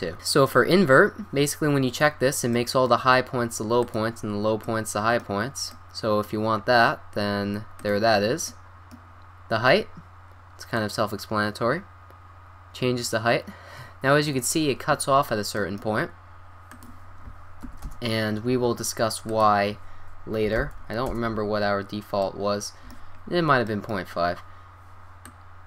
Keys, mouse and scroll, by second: 2.5 middle click, 4.1-5.2 drag, 5.2-5.8 middle drag, 5.9-6.6 middle drag, 8.0 drag, 8.1-9.6 middle drag, 10.7-12.8 drag, 15.0-16.3 middle drag, 16.7-18.5 drag, 19.3-21.3 drag, 22.2-23.9 middle drag, 25.2-25.6 drag.